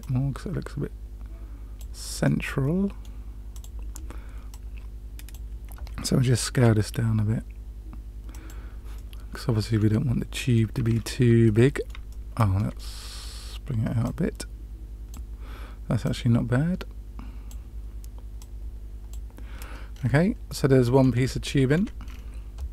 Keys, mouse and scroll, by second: 2.2-3.0 middle drag, 3.4 click, 4.4 click, 6.5 s, 8.9-9.8 middle drag, 10.2-10.6 middle drag, 10.8-11.4 scroll up 2, 11.4-11.9 middle drag, 12.0-12.5 shift+middle drag, 12.7-13.2 middle drag, 14.0-15.1 drag, 16.0-17.4 drag, 18.3 click, 19.9 scroll up 1, 19.9-20.3 scroll down 1, 20.4-21.0 middle drag, 21.3-21.8 shift+middle drag, 21.9 scroll down 1, 22.0-22.4 scroll up 1.